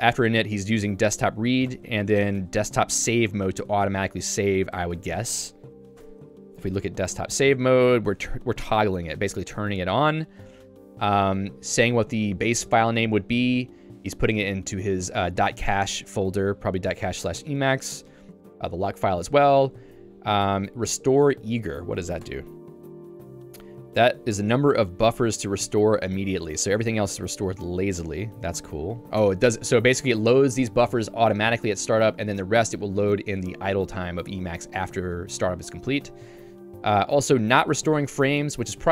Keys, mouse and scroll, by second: 1.3 Escape, 1.7 j, 4.4 Escape, 6.7 Return, 7.6 j, 9.7 q, 10.3 j, 14.3 Escape, 15.5 k, 17.0-21.3 typing, 20.5 Escape, 22.7 Return, 23.6 j, 25.2 k, 28.7 q, 29.2 Escape, 34.2 j, 37.4 l.